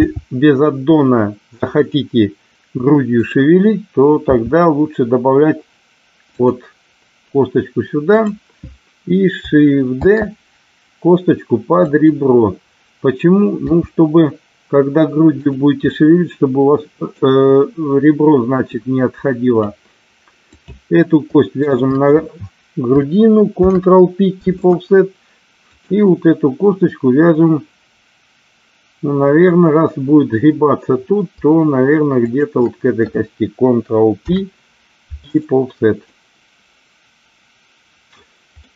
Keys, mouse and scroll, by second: 1.7 click, 3.2 click, 4.2 e, 6.4 click, 9.9 shift+d, 11.9 click, 13.5 r, 15.3 click, 15.9-17.1 middle drag, 18.7 click, 20.4 click, 21.7 shift+click, 23.6 ctrl+p, 32.2 shift+click, 34.2 ctrl+p, 36.1-38.2 middle drag, 38.6-38.7 middle drag.